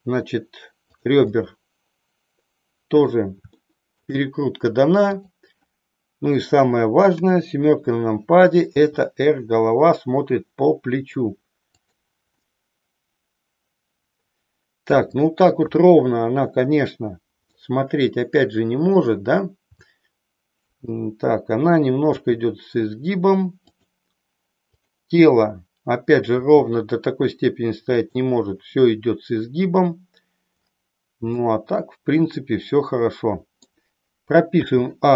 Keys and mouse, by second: 1.0 click, 1.3-3.1 middle drag, 3.6 shift+middle click, 5.0 click, 7.0 KP_7, 8.7 r, 11.9 click, 12.4-15.0 middle drag, 15.6 KP_3, 17.5-19.0 middle drag, 22.1 r, 24.6-25.7 drag, 26.3 r, 31.4-33.6 middle drag, 34.5 a.